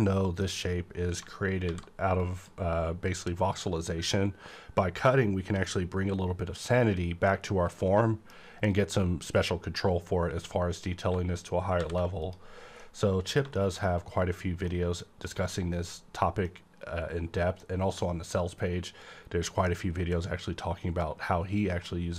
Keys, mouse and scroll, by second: 1.6 alt+v, 2.2 click, 2.2 click, 3.0-4.9 scroll up 2, 7.1-7.7 scroll down 1, 7.7-11.8 middle drag, 9.1-10.9 scroll up 1, 11.8 alt+v, 12.2 click, 12.7 scroll down 1, 12.8 middle click, 13.5 shift+middle click, 14.3-14.7 scroll down 1, 14.7-22.1 middle drag.